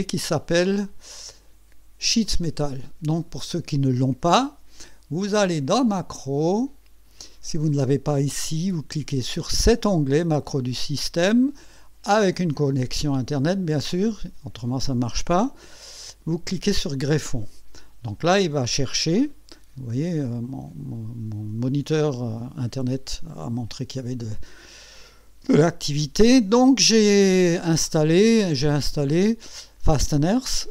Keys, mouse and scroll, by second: 1.0 click, 2.2 click, 5.5 click, 6.6 click, 9.5 click, 16.8 click, 18.7 middle click, 27.1-27.7 scroll down 4, 28.5-28.8 scroll down 2, 30.1 click.